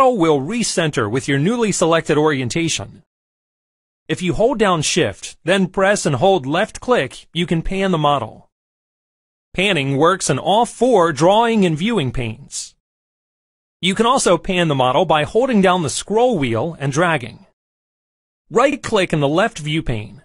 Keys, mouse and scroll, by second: 7.5-9.5 shift+drag, 10.0-11.3 shift+drag, 11.8-12.8 shift+drag, 13.3 shift+click, 14.7 shift+click, 16.8-18.0 middle drag, 18.8-19.8 middle drag.